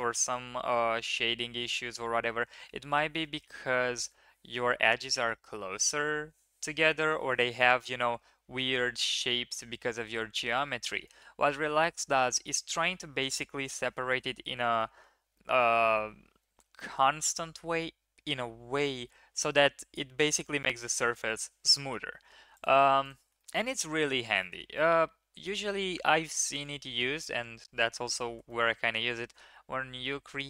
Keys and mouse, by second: 21.8 Tab, 22.7 x, 23.4 shift+middle click, 23.6 middle click, 24.1 shift+middle click, 24.4 middle click, 25.6 shift+drag, 26.5 shift+drag, 28.4 shift+middle drag.